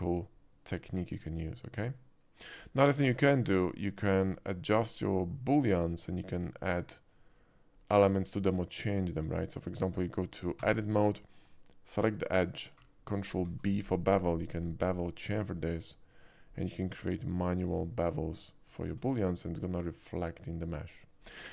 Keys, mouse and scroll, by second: 3.0 middle click, 3.3 middle click, 4.1 click, 5.0 click, 5.5 shift+middle drag, 10.7 Tab, 11.4 Tab, 11.9 click, 13.5 ctrl+b, 16.4 middle click, 16.4-17.0 scroll up 2, 16.9 middle click, 17.5 click, 17.8 middle click, 18.4-19.1 drag, 18.7 Tab, 19.1 middle click, 19.6 middle click, 19.7-21.2 drag, 21.4-21.5 shift+middle drag.